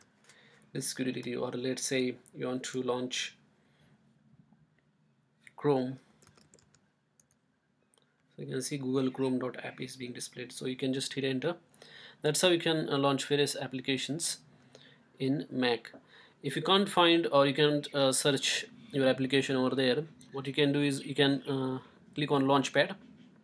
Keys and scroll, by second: 0.0-1.3 typing, 5.8-7.2 typing.